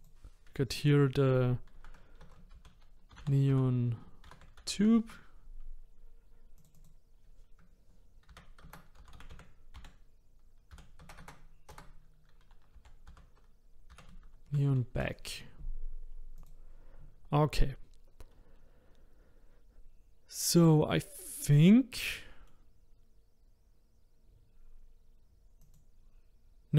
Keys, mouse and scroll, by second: 0.0-3.1 drag, 6.7-9.9 drag, 11.2 BackSpace, 20.5 click, 21.3-24.3 middle drag, 25.6 click.